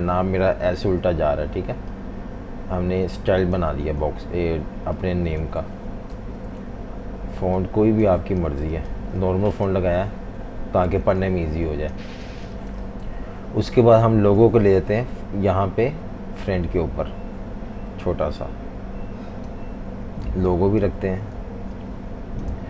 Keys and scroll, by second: 6.1 super+-, 6.3 super+-, 8.5 v, 8.6 space, 10.9 z, 11.0 z, 12.3 v, 12.4 space, 21.3 typing.